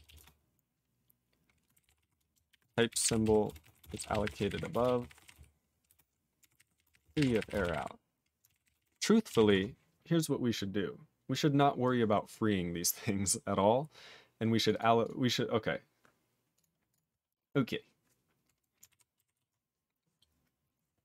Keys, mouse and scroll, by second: 0.1 /, 0.2 space, 1.5-8.2 typing, 8.5 ctrl+a, 8.5 ctrl+k, 8.7 ctrl+k, 8.7 ctrl+space, 8.8 ctrl+e, 8.8 ctrl+g, 9.5 ctrl+s, 11.8 click, 12.1 click, 12.3 click, 12.3 click, 12.8 scroll down 2, 13.7-14.6 scroll up 6, 14.6 click, 14.7 click, 14.7 double click, 14.8 double click, 15.0 click, 15.1 click, 16.5 click, 16.6 click, 16.9 click, 16.9 click, 18.9 ctrl+e, 19.3 ctrl+s.